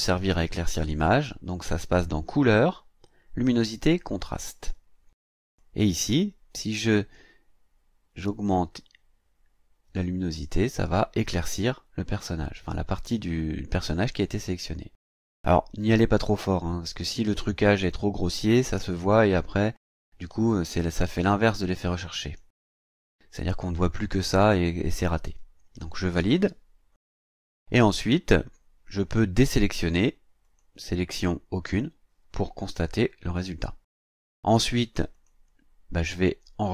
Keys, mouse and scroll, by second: 2.2 click, 4.2 click, 5.6 click, 7.1-10.9 drag, 14.3-20.0 drag, 20.3 click, 21.6 click, 26.2 click, 30.4 click, 31.6 click, 35.1 click.